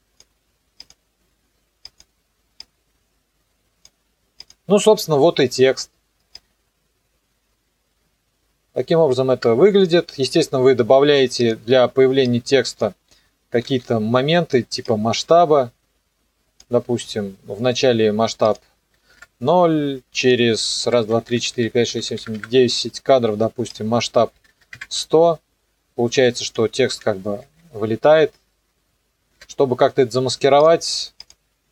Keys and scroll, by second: 13.6 s, 19.0 KP_0, 19.1 KP_Enter, 20.9 KP_7, 21.1 Page_Down, 24.2 KP_1, 24.4 KP_0, 24.7 KP_Enter, 27.0 n, 27.4 KP_0.